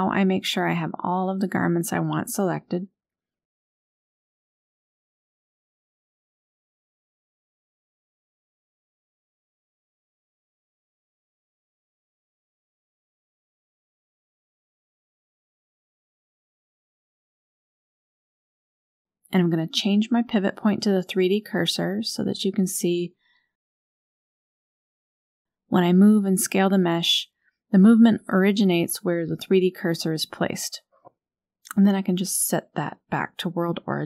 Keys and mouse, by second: 0.0 g, 4.3 g, 6.0 s, 14.9 KP_Decimal, 16.2-16.6 shift+drag, 17.3-17.6 shift+middle drag, 19.4-20.7 drag, 21.6 shift+middle drag, 24.0-24.5 shift+drag, 25.0 shift+middle drag, 26.3 click, 27.3 click, 27.8 click, 28.4 click, 28.8 click, 29.1 click, 30.0 a, 30.6 r, 33.2 shift+s.